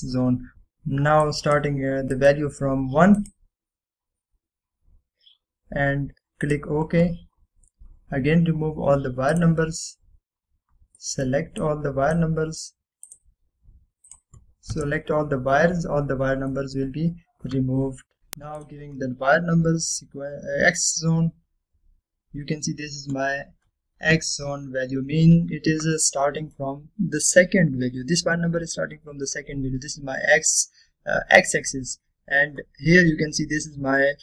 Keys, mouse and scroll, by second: 0.5 click, 2.7 click, 7.5 click, 8.4-8.7 scroll down 2, 11.4 click, 12.1 middle click, 12.7-13.3 drag, 15.8 Return, 17.6-18.2 middle click, 18.2 click, 18.2 Return, 19.1 click, 22.7 scroll up 1, 25.7-26.1 scroll up 1, 26.1 scroll down 1, 27.1-27.7 middle drag.